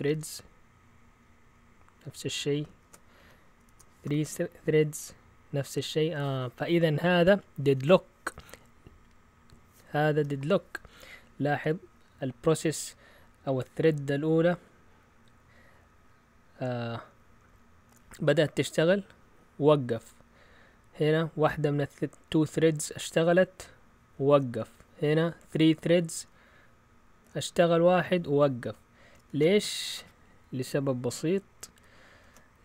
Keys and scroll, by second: 2.8 ctrl+c, 3.1 Up, 3.6 BackSpace, 4.0 BackSpace, 4.2 Return, 29.3 shift+super+z, 32.2 ctrl+c, 32.5 Up.